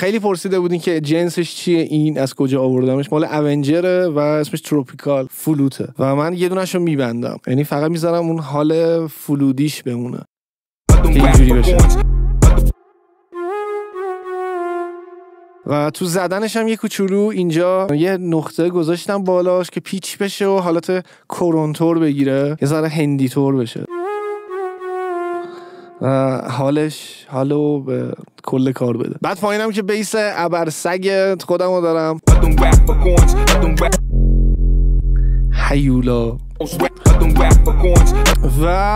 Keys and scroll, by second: 10.8 space, 15.3 space, 22.3 space, 25.7 space, 32.2 space, 33.9 space, 36.7 space, 38.2 space.